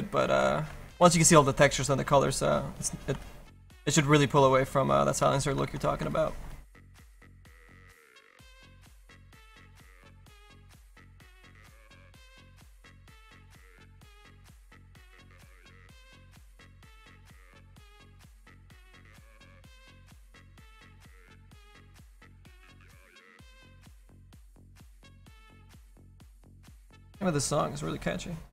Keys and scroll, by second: 11.9 s.